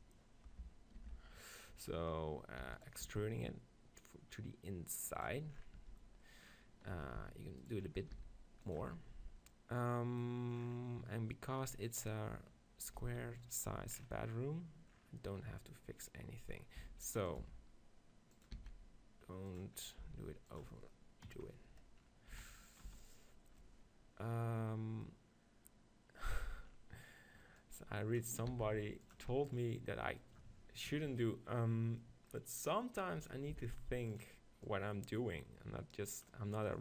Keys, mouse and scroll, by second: 0.0 KP_7, 1.0 ctrl+l, 2.6 e, 3.1 s, 5.3 click, 5.8 Tab, 7.0 Tab, 7.2 s, 7.7 right click, 8.2 s, 8.9 Tab, 13.0 z, 16.8 s, 17.4-18.6 drag, 17.6 g, 18.6 s, 20.2 g, 21.6 click, 22.4 s, 22.8-24.6 drag, 22.9 z, 27.6-31.1 drag, 28.5 s, 33.5 s, 34.7-36.6 drag.